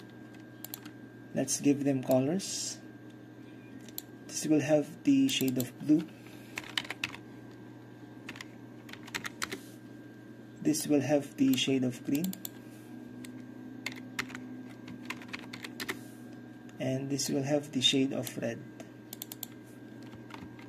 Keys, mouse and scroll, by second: 0.7 click, 1.2-1.7 drag, 1.7 middle click, 1.7-6.7 drag, 6.7 KP_4, 6.9 KP_2, 7.1 KP_8, 8.4 KP_5, 9.0 f, 9.2 KP_4, 9.5 Return, 10.9-13.9 drag, 13.9-15.8 typing, 15.9 Return, 17.3-20.5 drag, 20.2-20.6 typing.